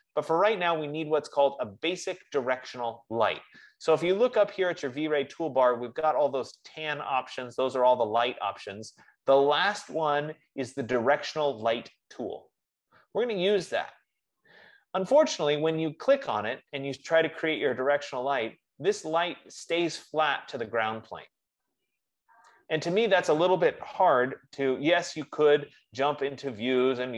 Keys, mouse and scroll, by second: 16.3 click, 17.9 click, 26.8 click.